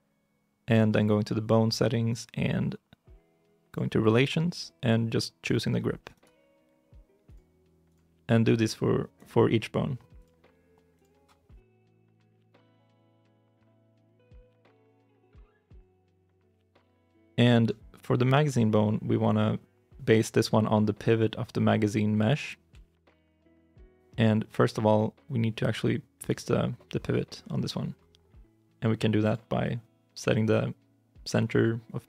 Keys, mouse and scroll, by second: 17.0 shift+i, 17.0 shift+middle click, 17.6-18.8 scroll down 1, 22.9 ctrl+Tab, 26.0 right click.